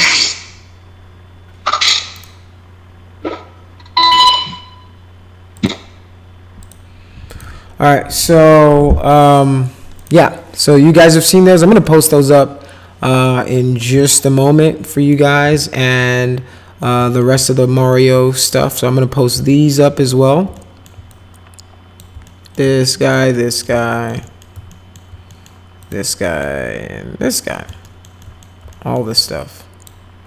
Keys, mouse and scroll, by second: 2.1 right click, 5.6 click, 6.6 click, 7.3 click, 10.0 click, 11.1 middle click, 11.8 middle click, 12.3 middle click, 14.0-15.1 alt+middle drag, 15.3 alt+middle click, 16.1 alt+middle click, 17.0 middle click, 17.4 alt+middle click, 19.2 click, 19.5 alt+middle click, 20.5 alt+middle click, 21.1 click, 22.2 alt+middle click, 23.0 click, 23.3 middle click, 23.7 alt+middle click, 24.2 middle click, 24.7 alt+middle click, 25.3 middle click, 25.8 click, 26.2 middle click, 27.4 alt+middle click, 27.8 alt+middle click, 28.2 middle click, 28.7 alt+middle click, 29.2 click.